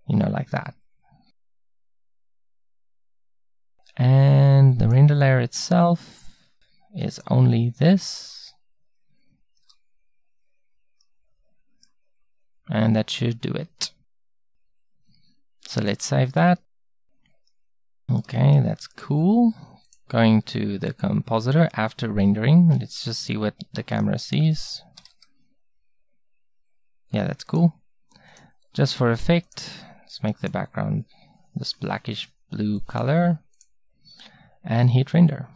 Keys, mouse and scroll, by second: 4.9-9.9 middle drag, 12.4 middle click, 15.8-19.7 middle drag, 21.2-23.0 middle drag, 23.0 KP_0, 25.0 r.